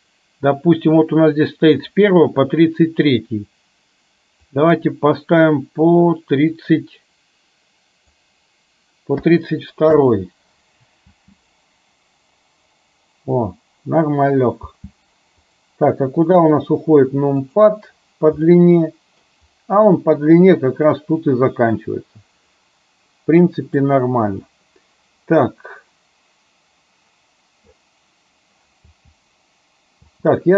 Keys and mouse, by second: 4.5-10.1 drag, 11.2 space, 14.7 space, 17.7 click, 18.5-19.4 middle drag, 21.0-23.9 middle drag, 29.0 space, 30.3 space.